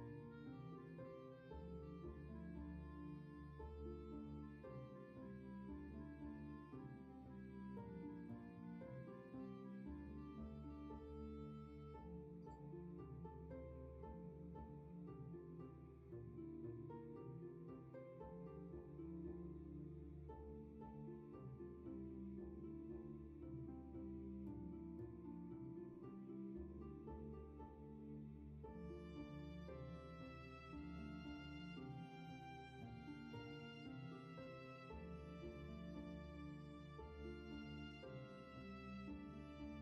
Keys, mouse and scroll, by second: 4.0 ctrl+z, 13.3 ctrl+z.